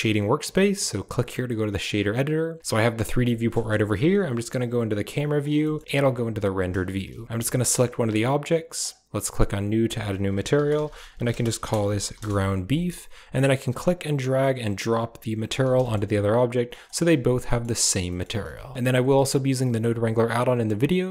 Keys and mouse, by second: 2.6 click, 3.4 KP_0, 5.0 click, 5.6 middle click, 5.8 z, 7.2 click, 8.7 click, 9.8-12.0 drag, 11.8 e, 13.5 click, 14.9 typing, 15.7 shift+middle drag, 16.0 right drag, 17.4 middle click, 18.0 click, 18.3 a, 18.7 click, 19.1 click, 19.6 click.